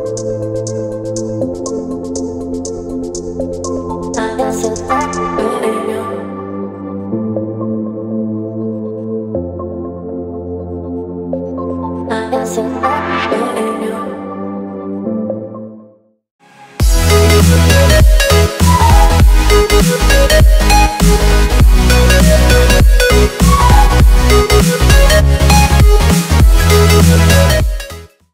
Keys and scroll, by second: 3.0 space, 6.1 z, 7.4 v.